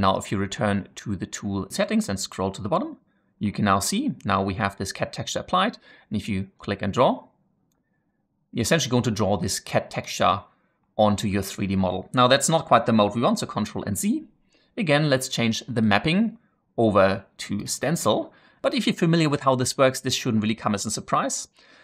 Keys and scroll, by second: 13.5 ctrl+z.